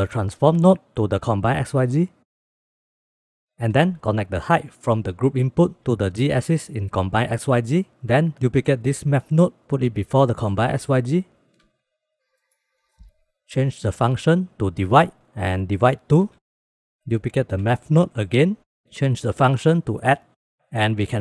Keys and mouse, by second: 2.7-3.1 drag, 3.3 click, 4.2 middle click, 4.6 click, 5.4-6.9 drag, 8.7 shift+d, 11.6 click, 11.8 click, 12.3 shift+click, 12.5 g, 14.3 click, 16.0 click, 17.7 shift+d, 19.4-20.6 drag, 21.0-21.2 drag.